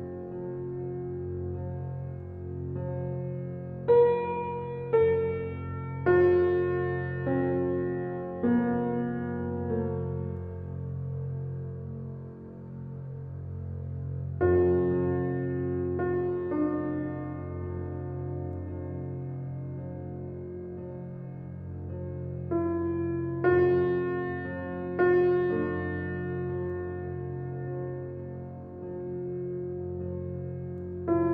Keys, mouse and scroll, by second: 0.2 shift+d, 1.4-2.6 middle drag, 3.5-5.0 shift+middle drag, 5.0 shift+d, 7.1 shift+d, 8.7 shift+d, 10.2 shift+d, 12.0 shift+d, 13.9 shift+z, 14.9 ctrl+z, 16.2 click, 17.3 shift+d, 18.9 shift+d, 20.3 shift+z, 21.5 click, 22.2 shift+d, 24.0 shift+d, 25.3 shift+d, 26.9 shift+d, 28.2 shift+d, 29.4 shift+d, 30.9 shift+d.